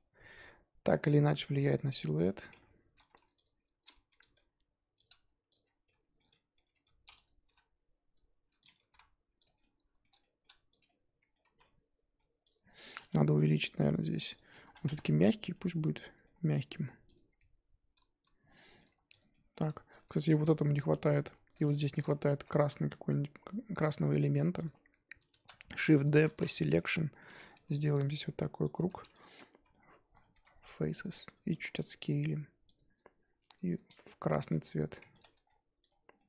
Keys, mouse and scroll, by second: 0.0-0.3 scroll up 1, 0.3 Tab, 0.9-1.2 scroll down 2, 1.7-2.5 middle drag, 2.5 Tab, 3.0 2, 3.4 alt+click, 4.1 g, 5.5 alt+click, 5.9 middle click, 6.6 g, 9.4 Tab, 9.6-10.7 middle drag, 10.7 click, 10.8-11.5 middle drag, 11.5 z, 11.6-12.4 middle drag, 12.4 click, 15.0 click, 15.4-16.3 middle drag, 16.3-17.1 scroll up 1, 17.1 click, 17.2 scroll down 2, 17.3-18.7 middle drag, 18.7-19.1 drag, 19.3-19.6 middle drag, 19.6-19.9 scroll up 1, 19.9-21.3 shift+middle drag, 21.3 scroll up 2, 21.6 click, 21.8-22.2 shift+middle drag, 22.2 Tab, 22.4 scroll up 2, 22.5 3, 24.6 alt+click, 25.3 shift+d, 26.3 p, 26.5 Tab, 26.7 click, 27.0 Tab, 27.5 ctrl+r, 28.7 3, 29.2 alt+click, 30.7 x, 31.5 a, 31.5 s, 32.8-33.2 scroll up 2, 33.2-34.4 scroll down 2, 34.4 g, 35.2 Tab, 35.4-35.8 scroll down 1, 35.8 click, 36.1 scroll down 1, 36.1-36.2 middle drag.